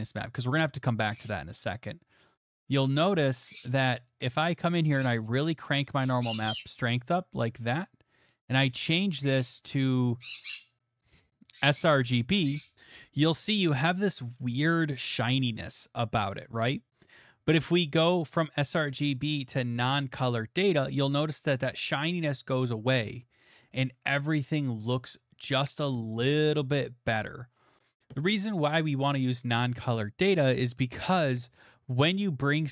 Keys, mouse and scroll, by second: 0.6 click, 2.2 middle click, 2.9 middle click, 4.2 middle click, 7.6 click, 8.5 click, 11.5 click, 12.7 click, 14.9 middle click, 15.7 middle click, 18.2 click, 19.6 click, 22.3 middle click, 25.1 scroll, 26.7 scroll, 27.5-28.0 scroll.